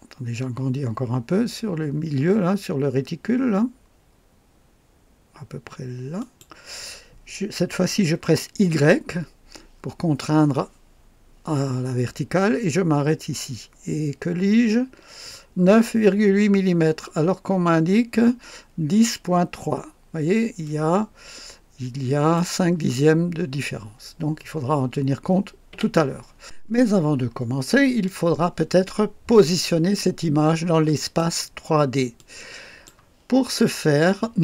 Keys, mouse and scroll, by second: 6.2 click, 8.7 y, 20.6 click, 25.7 Escape, 26.3 scroll down 1, 28.0-31.3 drag, 32.1-33.0 drag.